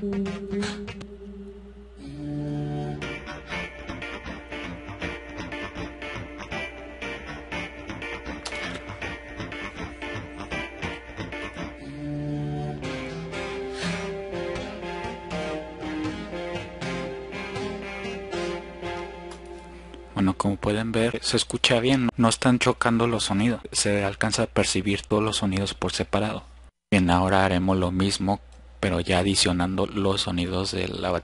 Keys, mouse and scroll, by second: 29.0 click.